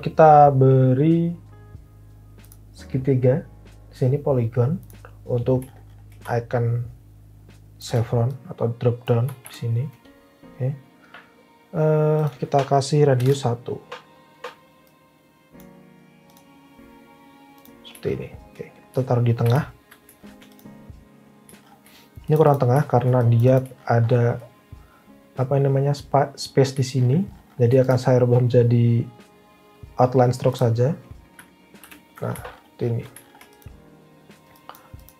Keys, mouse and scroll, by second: 9.4 v, 13.1 1, 13.7 Return, 19.4 alt+v, 31.7 alt+v.